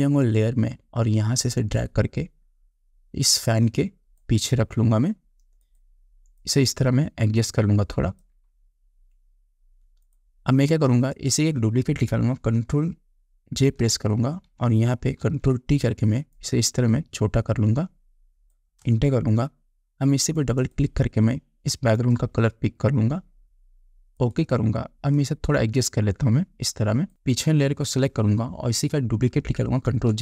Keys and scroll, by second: 14.1 ctrl+j, 15.7 ctrl+t, 19.3 Return.